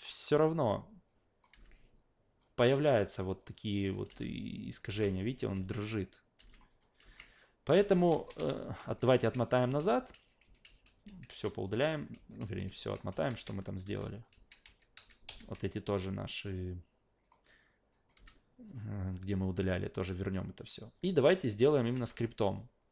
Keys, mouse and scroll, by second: 0.3 click, 1.1 click, 1.5 f, 2.4 click, 3.4-4.0 drag, 4.1 alt+v, 4.8 alt+v, 5.3 click, 5.6 alt+v, 6.4 alt+v, 6.7 click, 7.0 alt+v, 7.7 alt+v, 8.1 ctrl+z, 8.4 ctrl+z, 8.8 ctrl+z, 9.1 ctrl+z, 9.3 ctrl+z, 9.6 ctrl+z, 9.8 ctrl+z, 10.1 ctrl+z, 10.4 ctrl+z, 10.6 ctrl+z, 10.9 ctrl+z, 11.1 ctrl+z, 11.3 ctrl+z, 11.6 ctrl+z, 12.1 ctrl+z, 12.4 ctrl+z, 12.7 ctrl+z, 13.1 ctrl+z, 13.4 ctrl+z, 13.8 f, 14.3 ctrl+z, 14.6 ctrl+z, 14.9 ctrl+z, 15.3 ctrl+z, 17.2 click, 17.9 click, 18.7 click, 20.2-20.7 alt+right drag, 21.5 click, 21.9 alt+v.